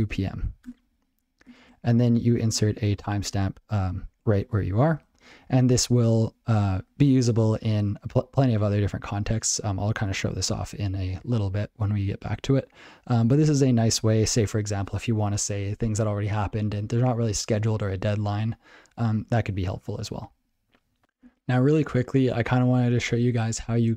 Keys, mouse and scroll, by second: 0.0-0.6 typing, 0.7 Return, 4.0 ctrl+e, 4.4 ctrl+a, 4.9 alt+c, 6.3 alt+c, 6.7 ctrl+g, 10.0 ctrl+p, 10.1 ctrl+g, 10.4 ctrl+n, 13.2 ctrl+a, 13.3 ctrl+space, 13.4 ctrl+n, 13.8 ctrl+g, 13.9 ctrl+p.